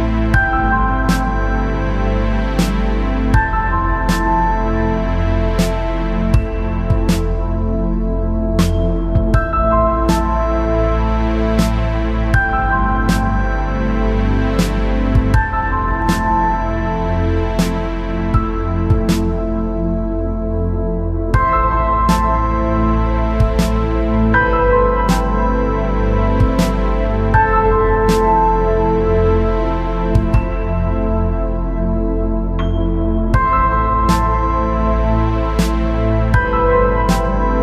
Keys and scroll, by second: 35.2-35.8 space.